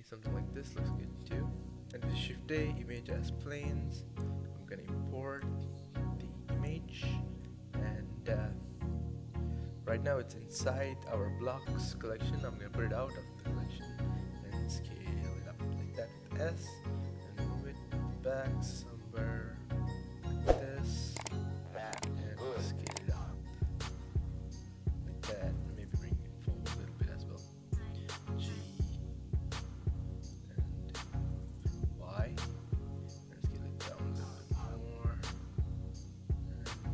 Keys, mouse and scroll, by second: 0.0 click, 0.4 middle click, 0.8 shift+a, 6.3-7.5 shift+middle drag, 7.5-7.9 scroll up 2, 7.9-8.8 middle drag, 8.8-9.2 scroll down 1, 10.3 click, 12.1 click, 13.1 click, 13.6 s, 15.4 KP_7, 15.9-16.6 scroll down 4, 16.6 g, 18.1-19.1 drag, 19.1 g, 20.8 KP_0, 21.7 s, 25.0 g, 25.1 z, 25.7 right click, 26.6 g, 27.6 g, 32.0 s, 33.9 g, 36.6 s.